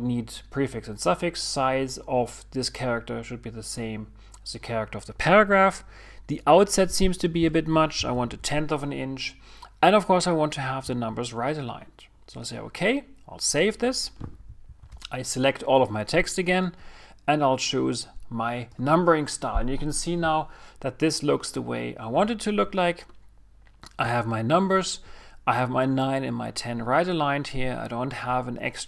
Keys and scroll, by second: 16.6 super+a.